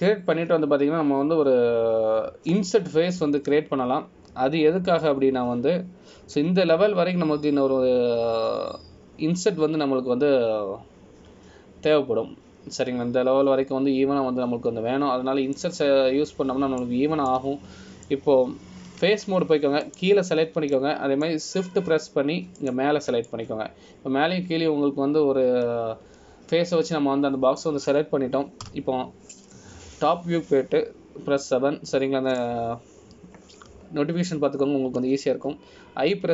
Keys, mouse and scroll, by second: 17.7 middle click, 19.5 middle click, 21.2 3, 22.0 click, 22.9 middle click, 23.6-24.2 scroll down 3, 24.7 shift+click, 25.4 middle click, 30.8 KP_7, 32.0-32.4 scroll up 2, 34.0-35.5 scroll up 1.